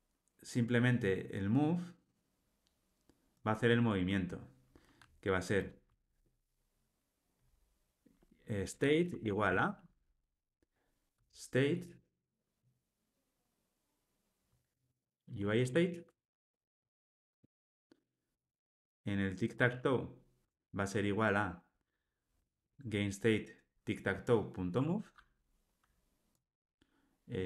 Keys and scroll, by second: 17.4 Return, 24.7 Tab.